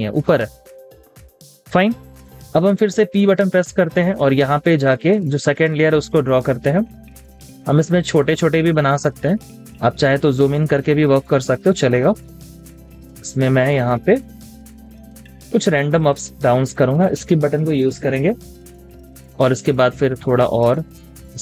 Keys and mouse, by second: 0.2-0.9 typing, 16.9 Escape.